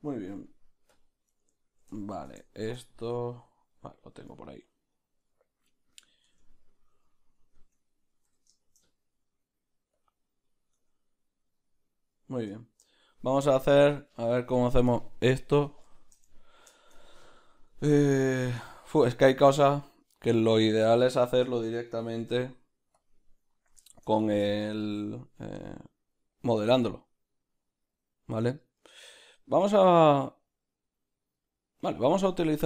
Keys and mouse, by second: 1.0 `, 1.2 `, 2.0-4.4 shift+middle drag, 5.3-7.7 middle drag, 6.4 Tab, 6.9 a, 7.7 Tab, 8.3 s, 12.6 shift+middle click, 16.3-18.4 ctrl+middle drag, 18.4 click, 18.7-24.3 shift+middle drag, 23.0 q, 24.3 click.